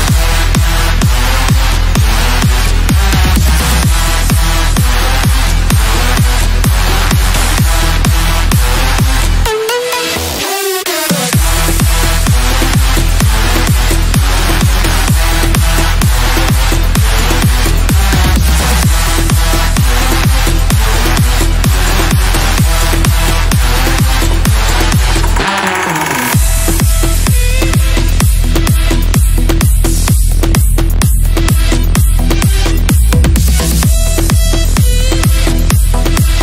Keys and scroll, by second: 28.3 ctrl+z, 28.7 F3, 29.1 Escape, 30.1 Return.